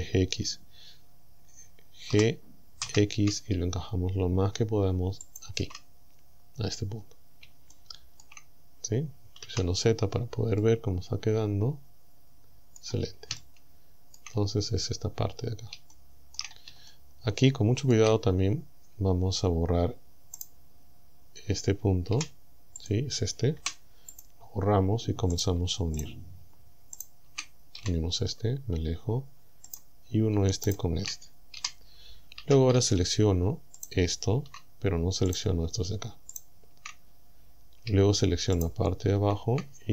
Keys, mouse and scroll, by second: 2.2 g, 2.9 x, 5.3 ctrl+click, 6.1-6.6 scroll up 2, 6.9 scroll up 2, 7.3 scroll down 3, 7.7 shift+middle click, 8.7 shift+scroll up 2, 9.5 z, 10.0-10.6 scroll down 2, 10.6-13.0 drag, 13.4 shift+click, 14.6-15.0 shift+scroll up 3, 15.4 scroll up 2, 15.9 shift+middle click, 16.9-18.1 shift+middle drag, 20.4 right click, 22.2 g, 22.8 click, 23.6 Delete, 24.2 click, 25.4 right click, 26.0 shift+right click, 27.0 shift+right click, 27.8 f, 28.2-28.7 scroll down 1, 29.7 right click, 30.7 shift+right click, 31.6 f, 32.4 a, 33.8 alt+shift+right click, 35.4 shift+right click, 36.4 shift+right click, 37.1 scroll down 1, 38.6 alt+shift+right click.